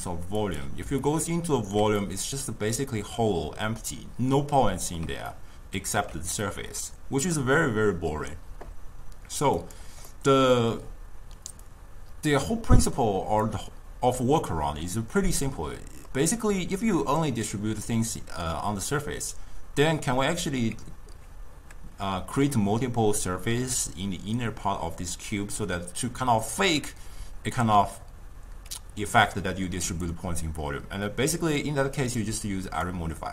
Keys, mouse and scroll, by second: 0.0-1.1 drag, 1.1-9.7 ctrl+middle drag, 9.7 click, 10.2-11.8 middle drag, 11.8-14.8 drag, 15.5-30.0 middle drag, 30.0 click, 31.7-32.9 drag.